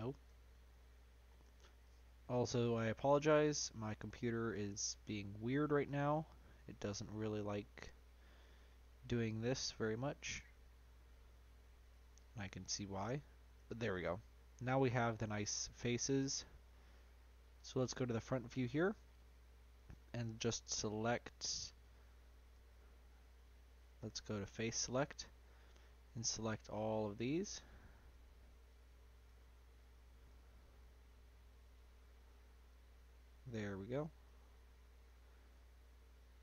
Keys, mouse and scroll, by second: 0.7 middle click, 1.4 ctrl+b, 4.0 scroll up 2, 4.1 middle click, 4.7-5.4 scroll up 2, 5.4 shift+middle click, 5.9-8.9 scroll up 1, 9.2-12.2 drag, 12.4 click, 12.7-13.2 scroll down 2, 13.2 middle click, 14.2 scroll down 4, 14.3 scroll up 1, 14.4-16.0 middle drag, 16.0 scroll up 1, 16.2-17.9 shift+middle drag, 17.9 click, 19.7 click, 20.4 click, 20.7-21.8 scroll up 2, 21.8 Tab, 22.5 Tab, 23.0 click, 23.9 3, 24.5 click, 25.0 shift+click, 25.4 shift+click, 26.6 shift+click, 27.4 shift+click, 28.1 ctrl+click, 28.6 ctrl+click, 29.2 ctrl+click, 29.8 ctrl+click, 30.2 ctrl+click, 30.8-31.7 scroll down 1, 31.7 ctrl+click, 32.6 ctrl+click, 33.5 ctrl+click, 33.9 ctrl+click, 34.5-36.4 scroll up 2, 34.5 middle click.